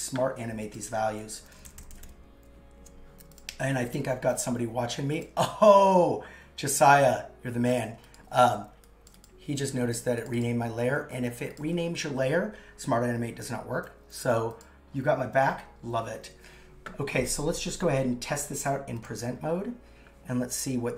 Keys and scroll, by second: 1.4 shift+Up, 10.0 super+c, 10.9 super+v.